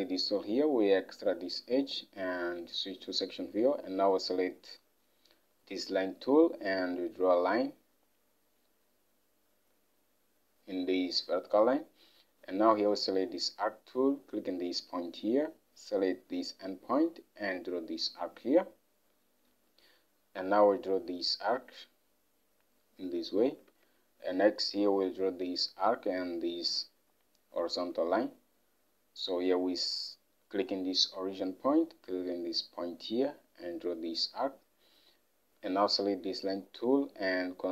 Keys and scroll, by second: 23.8 alt+Tab.